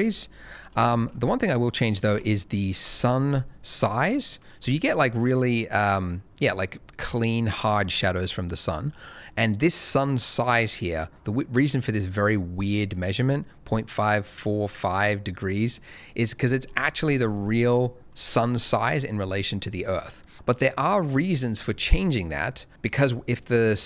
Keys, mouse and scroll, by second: 1.3 shift+middle click, 2.2 ctrl+middle click, 3.0 shift+middle click, 3.4 ctrl+middle click, 16.6-16.9 scroll down 1, 17.4 middle click, 20.3 right click.